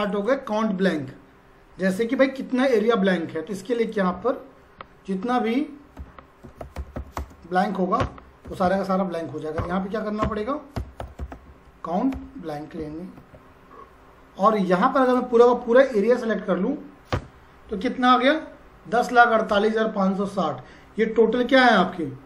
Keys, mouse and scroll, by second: 3.8 click, 5.7-7.4 typing, 8.0 Return, 8.5 Up, 8.6 Right, 9.6-12.8 typing, 13.1 Tab, 15.0 click, 17.1 Return.